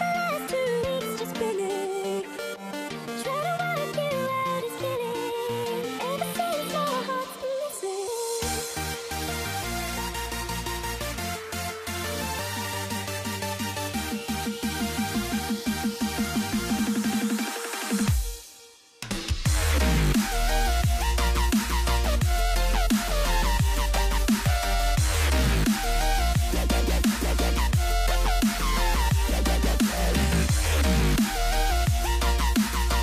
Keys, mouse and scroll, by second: 1.8 ctrl+j, 3.5 space, 5.0-6.5 middle drag, 6.5 o, 8.1-11.6 drag, 11.6 z, 13.4-15.3 middle drag, 15.3-17.4 drag, 17.4-19.5 scroll up 2, 21.8-26.3 middle drag, 26.3 c.